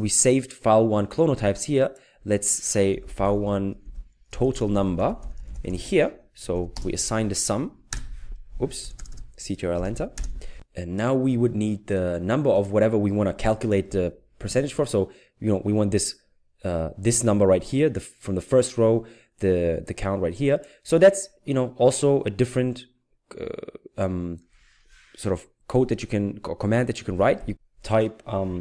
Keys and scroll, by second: 3.0-6.5 typing, 7.9 Return, 9.9-10.6 typing.